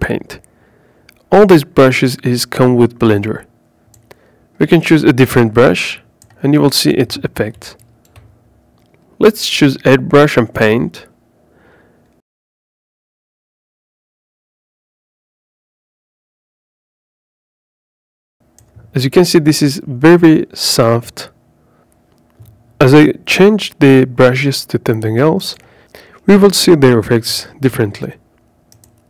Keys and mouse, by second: 2.2-8.8 drag, 10.7 ctrl+z, 15.4 KP_5, 18.1 click, 22.7-24.0 drag, 24.3 ctrl+z, 25.5 click.